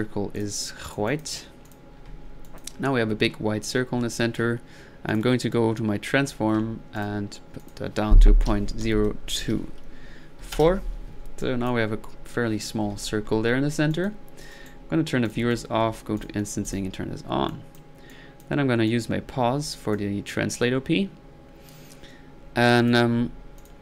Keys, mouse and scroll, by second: 0.4 click, 0.9 click, 2.4-3.0 drag, 6.9-7.4 drag, 7.6 drag, 11.4-12.0 drag, 13.9-14.3 drag, 14.5 right drag, 15.3 drag, 15.5 click, 16.2 click, 16.6 click, 17.5 click, 18.1 click, 18.9-20.0 drag.